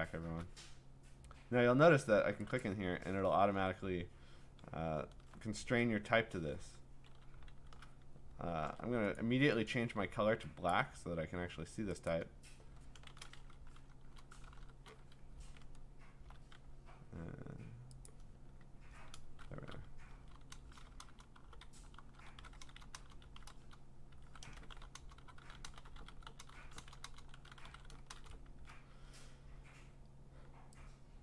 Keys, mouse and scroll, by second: 2.6 click, 3.4-3.9 scroll, 4.8 scroll, 7.5 c, 8.6 ctrl+a, 9.1 click, 9.7 click, 10.7 click, 12.1 click, 12.8-14.1 typing, 15.2 Escape, 15.5 middle click, 15.7-16.1 scroll, 16.1 typing, 18.1 click, 19.5-26.9 typing, 20.8-22.3 drag.